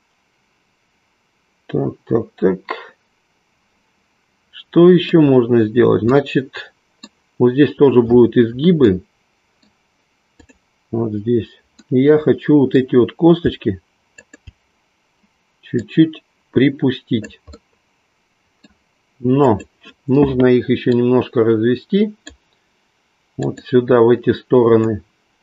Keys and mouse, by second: 6.7 middle click, 9.0 middle click, 10.5 click, 11.7-13.5 middle drag, 14.1 shift+click, 15.7-17.2 drag, 17.6-18.7 middle drag, 20.8-22.4 drag, 24.7-25.4 drag.